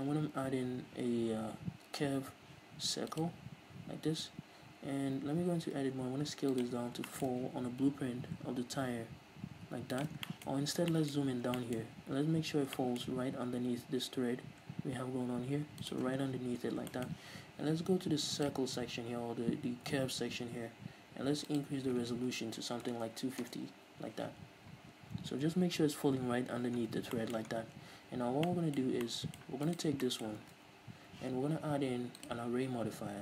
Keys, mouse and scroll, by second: 3.7-4.1 scroll down 1, 4.1-4.6 scroll up 1, 5.1 Tab, 5.7 s, 6.7 click, 6.9 scroll up 1, 7.2-10.2 shift+middle drag, 7.4 scroll up 1, 7.7 s, 10.2 shift+click, 10.4-16.1 shift+middle drag, 10.6 scroll up 1, 11.3 scroll up 1, 12.0-12.8 scroll up 1, 13.7 s, 16.1 shift+click, 16.2 scroll down 1, 17.0-18.5 shift+middle drag, 18.5-27.3 drag, 23.7 Return, 24.8-25.1 scroll up 1, 26.8 scroll down 1, 27.3-28.6 shift+middle drag, 27.6 scroll down 1, 27.8 Tab, 29.8 right click, 30.2 middle click, 30.8 ctrl+s, 32.3-33.2 drag.